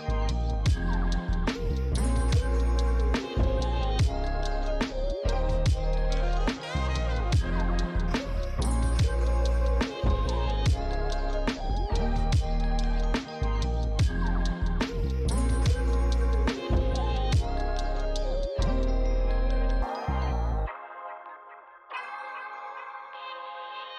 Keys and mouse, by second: 1.6-4.1 typing, 1.7 click, 2.5 click, 2.6 shift+click, 3.1 click, 3.3 click, 4.8 click, 5.5 f, 5.5 click, 9.4 f, 9.5 click, 9.7 f, 9.8 click, 11.0 shift+click, 19.0 click, 19.6 shift+click, 21.3 f, 21.4 click, 21.7 f, 21.8 click, 22.6 f, 23.3 click.